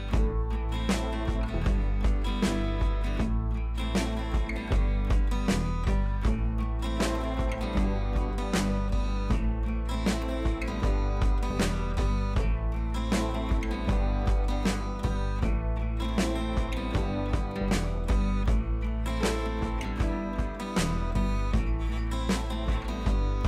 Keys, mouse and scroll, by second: 0.6-1.7 click, 3.7 scroll down 1, 4.2 click, 4.3 scroll down 1, 4.9 scroll up 1, 7.1 space, 7.3 click, 7.5 space, 9.1 click, 10.1-10.5 scroll up 1, 11.3 click, 13.7 click, 14.5 b, 15.1 [, 15.2 [, 15.3 [, 16.1 click, 16.5 [, 16.7 click, 17.3 ], 17.4 click, 19.1-19.7 click, 19.9 [, 20.1 click, 21.3 scroll down 1, 22.0 click.